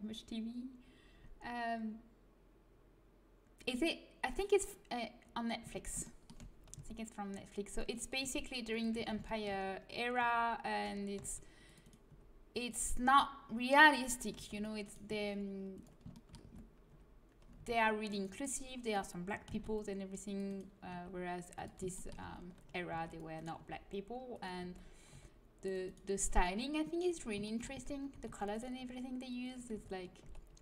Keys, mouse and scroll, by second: 6.7 c, 8.1 g, 9.0 a, 10.3 g, 11.1 c, 12.0 g, 13.0 a, 14.3 c, 15.0 g, 16.1-19.4 drag, 16.5 a, 16.8 g, 17.5 c, 19.4 c, 20.8 g, 21.9 click, 22.1 a, 22.9 c, 23.4 click, 23.5 g, 24.6 a, 25.0 c, 26.1 g, 27.7 a, 28.7 g, 29.7 a, 30.2 c.